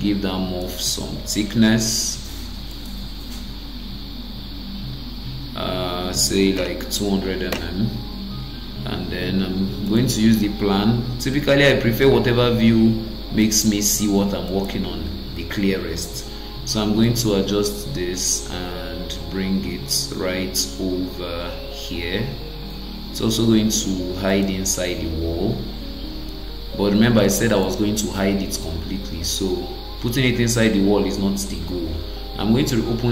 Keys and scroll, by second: 7.5 Return, 15.4 ctrl+d.